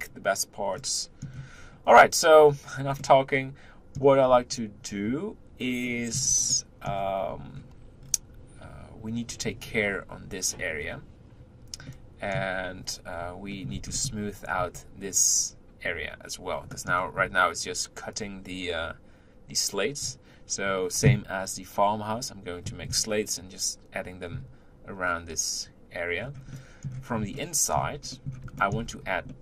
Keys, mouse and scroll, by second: 0.7-1.6 middle drag, 1.6-3.0 scroll up 1, 3.0-4.3 middle drag, 4.3-5.4 scroll up 2, 5.4-5.9 scroll up 1, 5.9-7.3 middle drag, 7.3-8.0 scroll up 2, 8.0-11.6 scroll down 2, 11.9-14.3 middle drag, 14.3-16.7 scroll up 1, 16.7-18.2 middle drag, 18.2-19.2 scroll up 2, 19.2-20.3 scroll up 1, 20.3-21.3 scroll up 1, 26.2 scroll down 2, 26.5-28.9 middle drag, 28.9 scroll up 1, 29.3-29.4 middle drag.